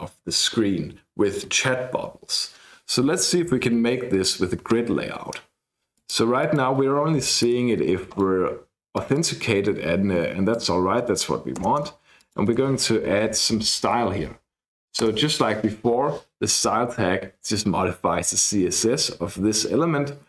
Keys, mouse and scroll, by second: 4.1 click, 5.3-5.9 scroll down 1, 5.9 click, 6.4 click, 7.5 BackSpace, 8.1 click, 8.9 click, 10.5 click, 11.6 Return, 11.8 Return, 12.2 click, 13.6-14.6 typing, 15.0 Return.